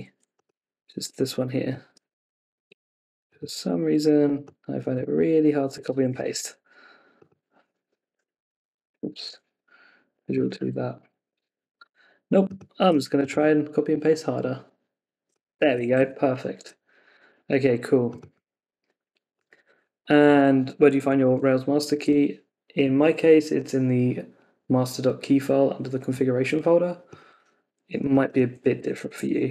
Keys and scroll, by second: 5.7 ↺, 6.1 super+z, 8.9 Escape, 11.3 Escape, 15.6 super+c, 16.0 super+Tab, 19.6 super+v, 21.2 super+Tab, 28.8 super+c, 29.2 super+Tab.